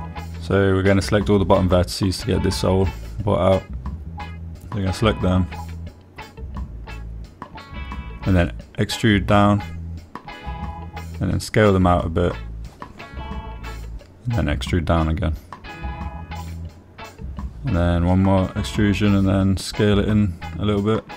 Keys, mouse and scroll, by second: 0.7-1.9 drag, 2.5 shift+click, 3.1 shift+click, 4.9 shift+middle click, 6.7 e, 8.4 click, 9.2 s, 11.7 click, 17.3 click, 18.9 e, 19.2 s, 20.5 click, 20.9 g.